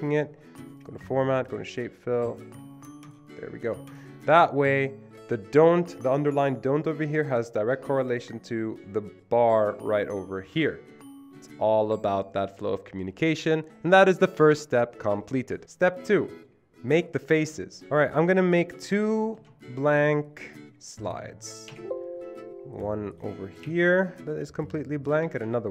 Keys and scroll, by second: 19.4 ctrl+d, 21.7 Delete, 23.7 Delete, 25.4 ctrl+d.